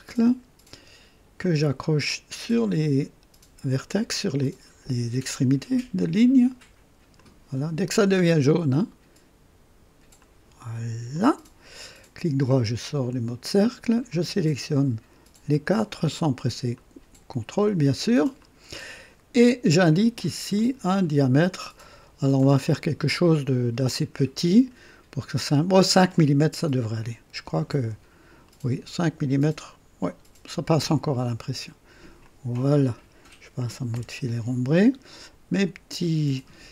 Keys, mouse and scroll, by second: 1.4 click, 2.1 click, 4.3 click, 5.3 click, 7.1 click, 7.8 click, 10.2 click, 11.1 click, 12.4 right click, 14.0 click, 15.5 click, 16.7 click, 18.3 click, 20.5 click, 27.3 KP_5, 27.7 Return, 32.2 click, 33.9 &, 34.7-36.2 drag.